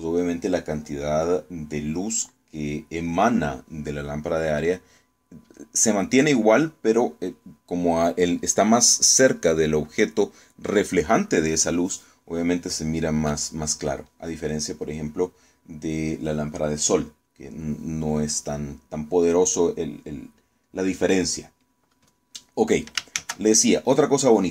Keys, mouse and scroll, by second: 23.8 shift+z.